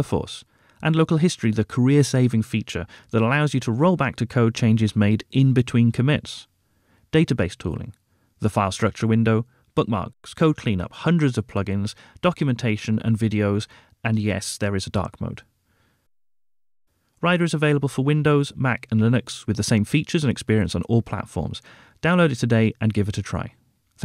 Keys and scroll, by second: 13.6 ctrl+`.